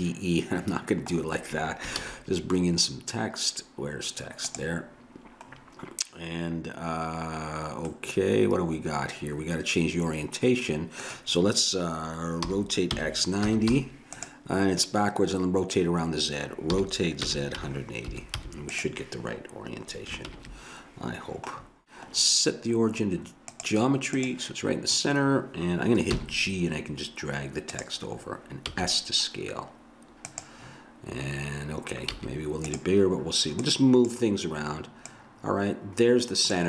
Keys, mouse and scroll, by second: 2.0 shift+a, 7.9-9.7 middle drag, 12.5 r, 16.8 r, 20.3 ctrl+KP_1, 23.5-25.2 drag, 26.1 g, 28.7 s, 32.2 s, 33.6 click.